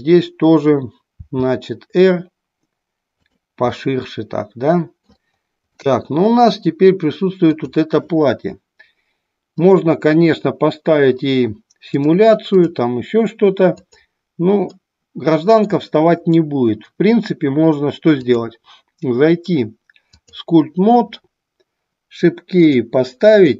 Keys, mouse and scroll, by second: 1.3 r, 3.2 click, 3.7-5.1 middle drag, 5.8-6.8 middle drag, 7.4 click, 11.9-12.7 drag, 14.7-15.7 middle drag, 18.1-20.6 drag, 23.2 click.